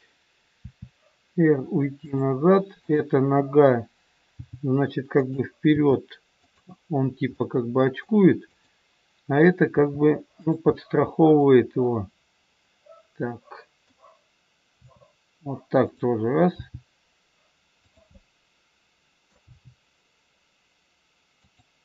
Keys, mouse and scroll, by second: 0.7 r, 2.9 click, 4.3 g, 5.6 r, 7.3 middle click, 8.5 click, 9.8 r, 10.6 scroll up 1, 10.8 middle click, 14.6 r, 16.5 g, 18.0 middle click, 19.4 g.